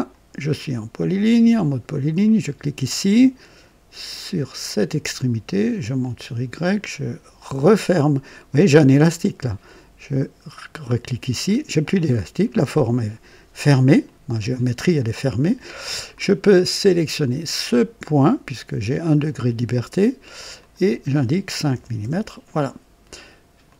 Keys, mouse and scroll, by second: 2.2 click, 4.7 click, 6.0 click, 10.8 click, 12.4 right click, 14.0 right click, 15.5 right click, 16.0 click, 18.2 click, 20.5 click, 21.7 KP_5, 22.0 Return, 23.6 click.